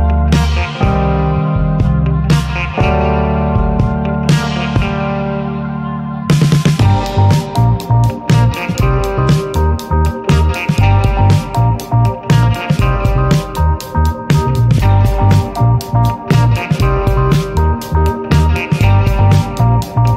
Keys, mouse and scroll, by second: 0.7-4.9 drag, 5.0-6.1 drag, 6.1-8.8 middle drag, 8.9 click, 9.4-10.6 middle drag, 10.6-14.6 drag, 14.6-15.9 middle drag, 15.9 click, 16.4-18.6 middle drag, 18.6-20.1 drag.